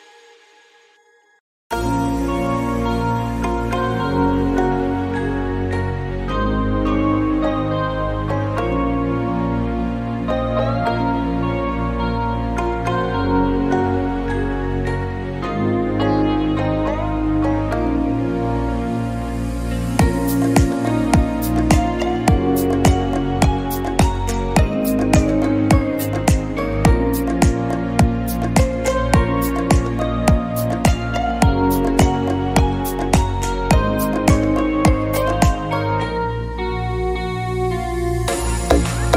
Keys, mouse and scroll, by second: 2.3-3.7 scroll down 4, 4.4-5.5 scroll up 2, 5.5 scroll up 1, 6.1-6.5 scroll up 3, 7.7 click, 13.4 click, 16.2 click, 18.4-18.7 scroll down 3, 19.7-20.4 drag, 20.4-21.4 scroll down 3, 21.2 click, 23.0 click, 25.3 click, 29.2-31.1 middle drag, 29.9 shift+a, 31.5 click, 32.4 KP_Decimal, 32.9 scroll down 3, 33.1-35.3 middle drag, 34.2-35.7 drag, 35.7-36.4 scroll down 5, 36.3 click, 36.9 KP_0, 38.4-38.8 scroll down 1.